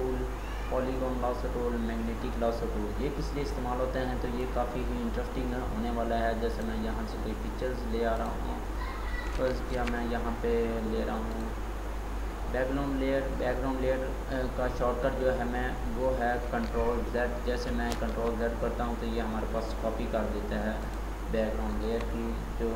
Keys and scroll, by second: 9.8 ctrl+d, 17.6 ctrl+j.